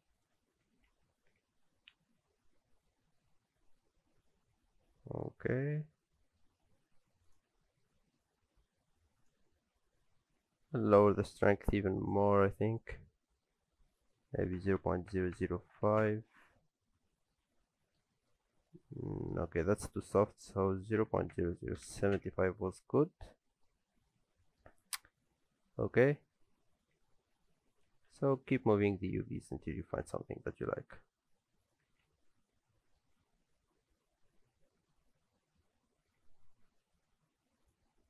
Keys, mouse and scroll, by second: 0.7 alt+a, 1.0 Tab, 1.0 scroll down 3, 1.3 alt+a, 1.4 middle click, 5.5-6.5 scroll down 7, 5.9 middle click, 6.5-7.3 scroll up 2, 9.0-9.7 scroll up 2, 12.4 click, 15.4 KP_0, 16.9-17.3 scroll up 3, 17.7 middle click, 17.7-18.0 scroll up 2, 18.1 shift+middle click, 19.5 shift+middle click, 19.6 shift+scroll up 1, 20.5 click, 21.4 KP_0, 23.0 scroll down 1, 23.2 middle click, 23.8 scroll up 2, 24.1 middle click, 25.1 alt+a, 27.7 click, 28.0 Tab, 28.1 a, 29.0 s, 31.9 alt+a, 32.1 Tab, 32.2-32.6 scroll down 2, 32.4 middle click, 33.1 alt+a, 33.3-34.2 scroll down 2, 33.4 middle click, 37.6 click.